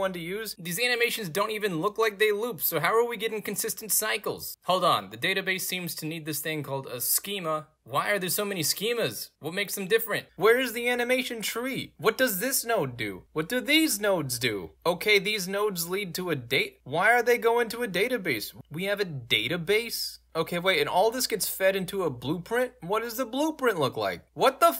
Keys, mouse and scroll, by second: 1.8-3.0 right drag, 3.2 alt+right click, 4.4 alt+middle click, 4.6 ctrl+space, 5.8 click, 5.9 click, 8.0 click, 8.6 click, 8.7 drag, 9.1 click, 9.3 click, 9.7 click, 9.8 click, 9.8 click, 9.9 click, 10.0 middle click, 10.0-10.5 scroll down 3, 10.5 scroll up 2, 10.9 right click, 11.2 middle click, 11.2-11.5 scroll up 2, 11.6-13.3 right drag, 13.3 click, 13.4 right click, 13.6 scroll up 4, 13.7 right click, 14.0 right click, 14.2 right click, 14.4 middle click, 14.4 scroll down 2, 14.7 right click, 14.9 right click, 15.6 right click, 15.7 right click, 16.5 right click, 16.8 click, 16.9 click, 18.1 click, 18.1 click, 19.3 alt+right click, 20.1 alt+click, 21.2 middle click, 21.2-22.5 scroll down 8, 23.0 click, 23.3 scroll down 2, 23.9 scroll down 2, 24.3-24.7 right drag.